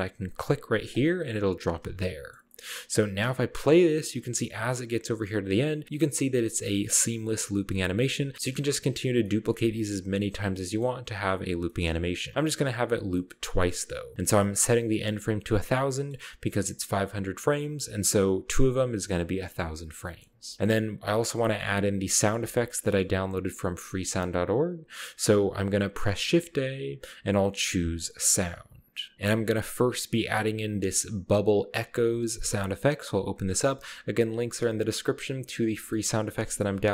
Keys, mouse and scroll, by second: 1.0 click, 2.1-3.3 ctrl+middle drag, 4.8 click, 5.8-6.7 scroll up 1, 8.3 shift+middle click, 8.3-10.9 scroll down 4, 8.5 d, 9.6 d, 10.3-12.8 shift+middle drag, 10.9-12.8 scroll up 1, 12.3 typing, 13.2-14.3 middle drag, 13.7-14.3 scroll down 1, 16.0 middle click, 20.1-22.2 middle drag, 20.3-20.7 scroll up 1, 22.2-23.0 scroll down 1, 23.0 ctrl+middle click, 24.0 space, 26.4 shift+a, 29.1 click, 33.2 click, 34.0-34.6 drag, 35.6-36.9 scroll down 3.